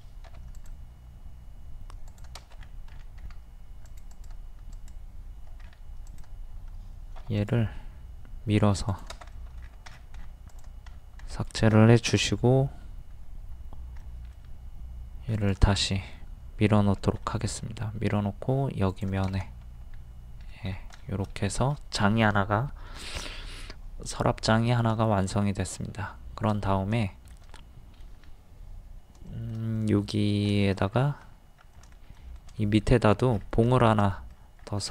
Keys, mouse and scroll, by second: 0.3 typing, 2.5 scroll up 1, 3.9 click, 5.6 scroll up 1, 6.1-7.1 drag, 7.2 d, 7.4 click, 9.4 middle click, 9.6 scroll down 1, 10.5 click, 10.9 scroll up 1, 12.1 typing, 14.0-15.1 middle drag, 15.4 click, 17.2 shift+middle click, 18.9 shift+click, 19.4 middle click, 20.7 scroll down 1, 21.1 shift+middle click, 24.5-24.9 scroll down 1, 25.1 shift+middle click, 25.3 scroll down 1, 26.0-27.5 shift+middle drag, 29.3 shift+middle click, 30.9-31.2 scroll up 1, 31.7 middle click, 32.6 middle click, 33.3 scroll down 1, 34.0 shift+middle click, 34.6 scroll up 1.